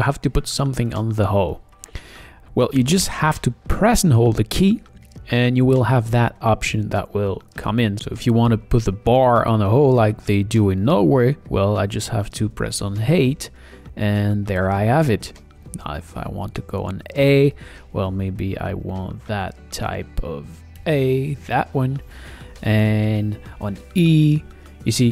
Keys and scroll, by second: 3.9 o, 13.1 8, 16.2 a, 20.8 1, 23.6 e.